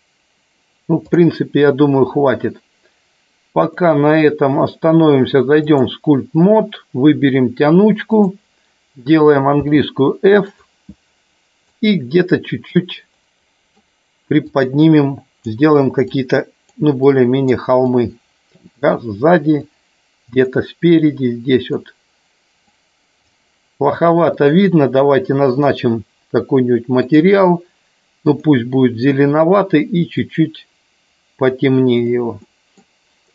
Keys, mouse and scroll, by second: 1.0 click, 3.8-5.8 drag, 8.0-8.4 drag, 11.7 click, 13.1 middle click, 14.5 click, 16.1 click, 16.9 click, 17.7 click, 19.6 click, 20.9 middle click, 22.5 click, 24.3 click, 25.5 click, 32.3 middle click.